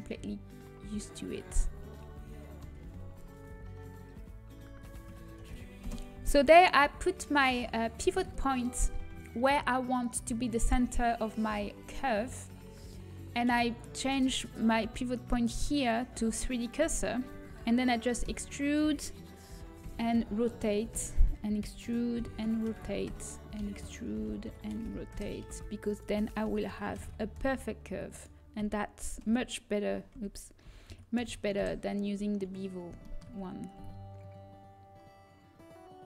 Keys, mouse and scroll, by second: 3.8 r, 8.3 middle click, 15.5 click, 19.9 e, 19.9 r, 21.9 e, 25.5 e, 25.5 r, 32.3 r, 33.7 e.